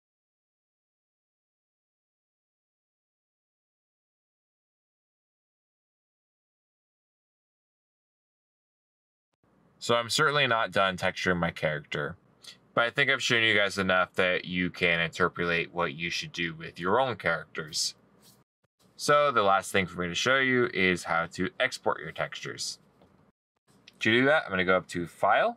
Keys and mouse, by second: 3.9 middle click, 4.3 right click.